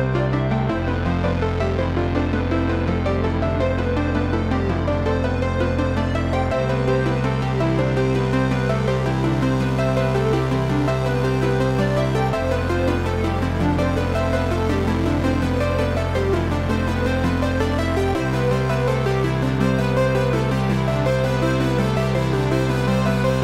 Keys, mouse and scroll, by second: 0.4 shift+z, 0.7 scroll up 1, 1.1-8.4 shift+middle drag, 1.4 scroll up 1, 7.6 g, 8.4 click, 8.6 s, 9.6 click, 10.3 KP_7, 10.8-13.1 middle drag, 11.3 scroll down 1, 11.6 scroll up 1, 12.2 s, 13.1 click, 13.5 Tab, 14.2 shift+z, 14.9 shift+i, 16.3 shift+3, 16.8 shift+click, 17.3 shift+i, 17.9-19.8 shift+middle drag, 18.3 shift+scroll down 1, 18.9 Tab, 19.6 Tab, 19.8 click, 21.9 click, 22.9-23.4 middle drag.